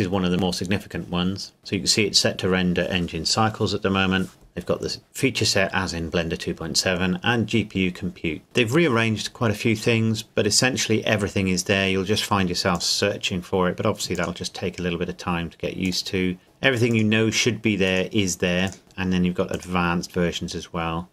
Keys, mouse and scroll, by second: 1.6 click, 12.7 click.